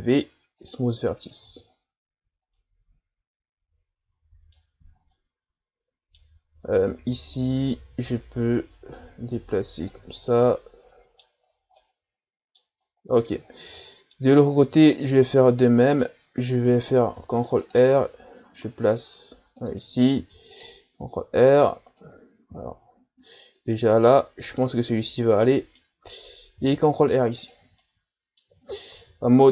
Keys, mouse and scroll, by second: 1.4 Tab, 1.8-2.2 scroll down 3, 2.2 a, 2.6-6.4 middle drag, 6.4-6.7 scroll up 1, 6.7 Tab, 7.4 right click, 8.1 right click, 9.0-10.1 drag, 10.1 Tab, 10.4-11.4 middle drag, 11.4 scroll down 2, 11.7 scroll up 1, 11.8-13.4 middle drag, 13.4-13.8 ctrl+scroll down 2, 13.8-14.4 middle drag, 14.4-14.9 scroll up 5, 14.9 Tab, 15.2-17.2 middle drag, 17.2 ctrl+r, 22.5 ctrl+z, 23.7-25.4 middle drag, 25.4 scroll up 1, 25.4-26.6 middle drag, 26.6 ctrl+r, 27.4 click, 27.8-28.9 middle drag, 28.9 ctrl+Tab.